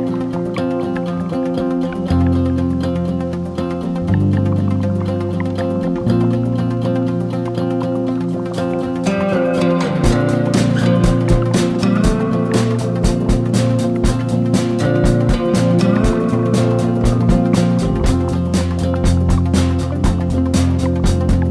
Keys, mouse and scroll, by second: 6.5 ctrl+scroll up 1, 8.3-21.5 drag.